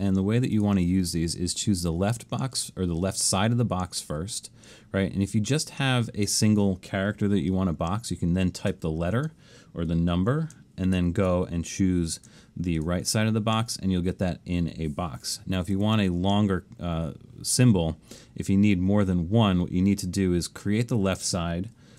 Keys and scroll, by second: 8.7 shift+a, 11.0 alt+shift+super+s, 15.3 BackSpace, 15.8 BackSpace.